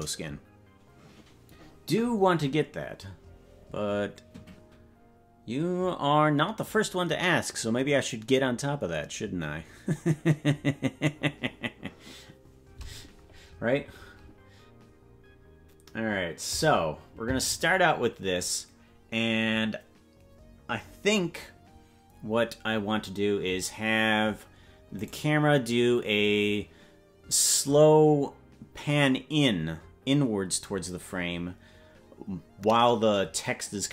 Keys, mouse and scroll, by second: 17.9 click, 25.6 right click.